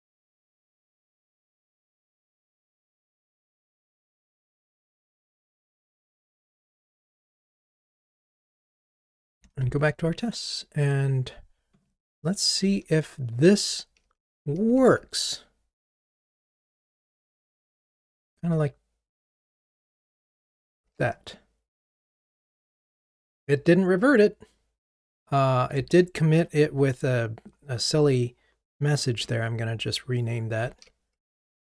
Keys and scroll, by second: 13.4 super+/, 20.8 ctrl+r, 25.9 super+9, 29.2 super+9, 29.3 F2, 30.7 super+a.